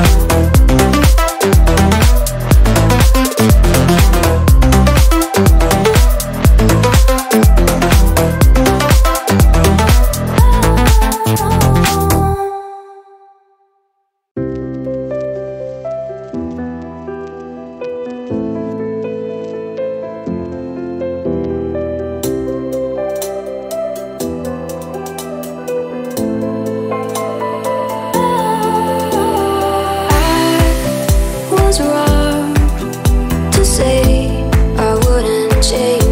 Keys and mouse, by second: 1.4-2.7 middle drag, 2.7 click, 3.8-6.8 middle drag, 6.8 ctrl+a, 8.1 BackSpace, 8.3 BackSpace, 11.9-14.1 drag, 15.1-15.9 drag, 15.9-17.4 middle drag, 17.4-19.6 drag, 19.6-20.3 middle drag, 20.3 click, 22.0 click, 23.9 click, 24.2 5, 26.2-29.3 drag, 31.1-32.1 drag, 32.1 0, 34.4 click, 35.7-36.1 drag.